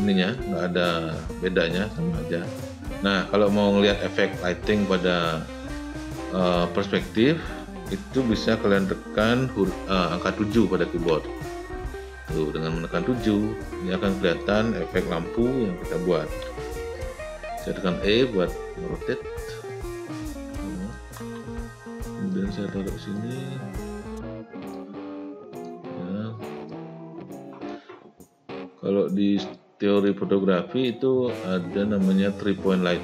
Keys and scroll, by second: 11.1 7, 21.3 w.